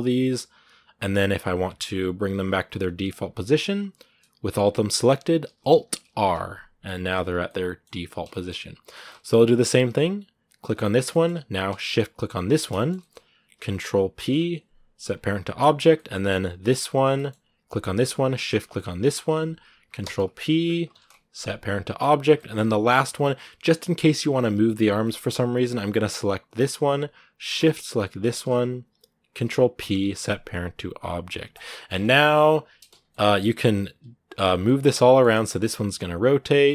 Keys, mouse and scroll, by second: 0.4 right click, 0.6 g, 7.2 shift+middle click, 7.7 scroll down 1, 7.9 a, 8.1-10.5 shift+middle drag, 10.5 right click, 10.9-12.2 shift+middle drag, 12.2 shift+right click, 12.6 shift+middle click, 12.9 scroll up 2, 15.5 ctrl+p, 15.7 shift+middle click, 15.9 shift+scroll up 1, 16.9 scroll up 1, 16.9 middle click, 17.2-17.9 scroll down 2, 18.1-18.8 scroll up 3, 18.8-21.8 shift+right drag, 21.8 ctrl+p, 22.1 shift+middle click, 22.6 scroll up 2, 23.0 right click, 24.8-26.4 middle drag, 26.4-31.4 right drag, 31.4 ctrl+p, 31.7 scroll down 2, 31.9 middle click, 32.4 right click, 32.6 middle click, 32.8-33.4 scroll up 2, 32.9 middle click, 33.4 r, 34.4 scroll down 2, 34.4 middle click, 35.0 scroll up 1, 35.3 r, 36.3 scroll down 2, 36.5-36.7 middle drag.